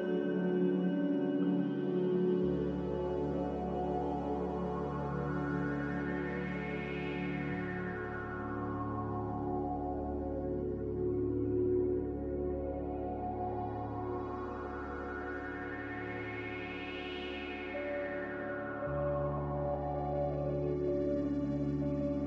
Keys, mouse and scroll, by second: 14.9-15.8 typing, 16.2 Escape, 17.3 typing, 17.8 Return.